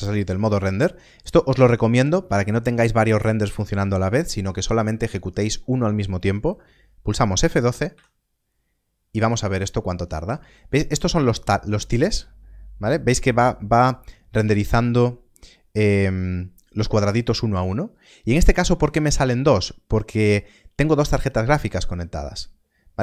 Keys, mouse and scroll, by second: 7.8 click, 8.0 F12.